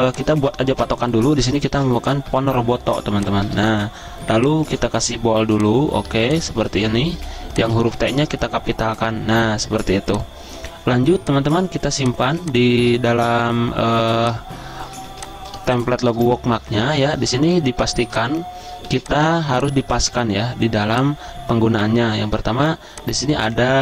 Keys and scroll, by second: 1.2-2.3 typing, 6.1 z, 7.2 t, 8.2 shift+t, 11.9-12.8 typing, 15.1 z, 16.2 v, 18.9 z, 20.0 v.